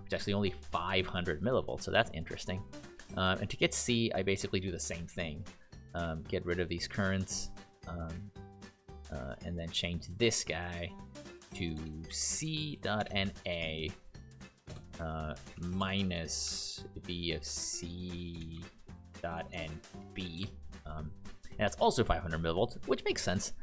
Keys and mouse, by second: 3.5 click, 11.2 Right, 11.7 BackSpace, 12.0 shift+c, 12.4 Right, 12.5 Right, 12.7 Right, 12.9 BackSpace, 13.2 shift+a, 14.3 Right, 15.5 -, 16.4 shift+v, 17.6-20.4 typing.